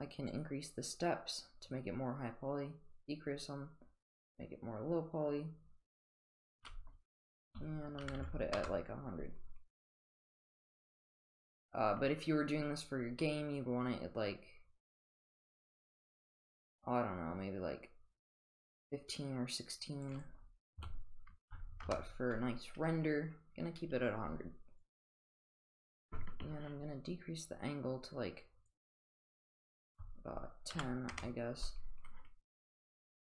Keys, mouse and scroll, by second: 0.3-6.4 drag, 6.5-9.0 drag, 8.2 0, 10.2-12.8 drag, 12.9 click, 13.6-20.0 drag, 20.1-22.2 drag, 21.5 0, 24.8-28.7 drag, 28.8-31.5 drag.